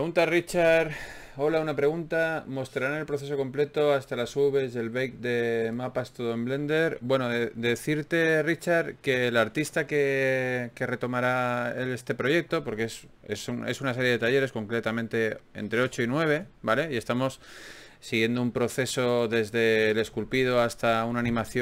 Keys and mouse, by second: 1.7 click, 2.3 f, 2.5 f, 3.1 f, 5.5-6.9 drag, 6.9 f, 7.3 click, 7.8 f, 8.4 middle click, 10.0-12.2 right drag, 10.7 f, 11.9 f, 12.2-13.4 middle drag, 13.4 f, 13.6 f, 14.4 middle click, 15.0-17.0 middle drag.